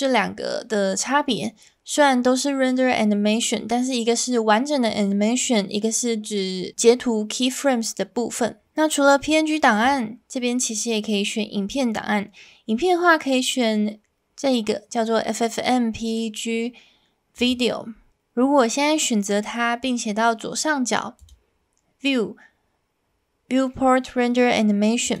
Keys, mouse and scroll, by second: 9.8-17.5 drag, 21.2-25.2 drag.